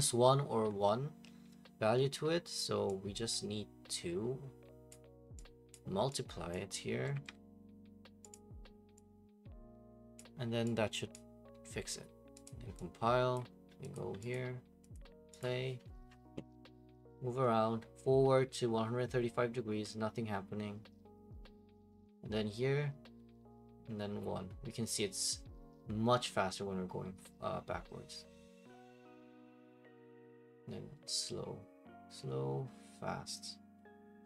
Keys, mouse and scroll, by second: 3.3 click, 4.9 click, 5.7 click, 6.5 click, 7.1 *, 8.3 click, 10.1 click, 11.1 click, 12.4 click, 13.3 click, 13.9 click, 14.3 click, 14.9 click, 15.4 click.